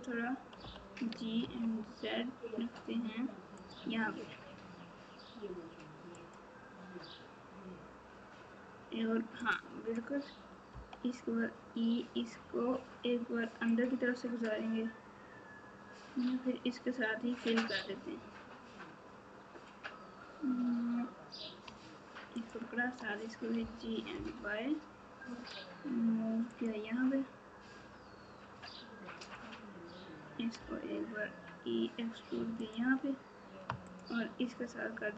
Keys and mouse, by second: 0.6 g, 6.2 click, 10.7 e, 23.5 g, 29.2 click, 30.5 e.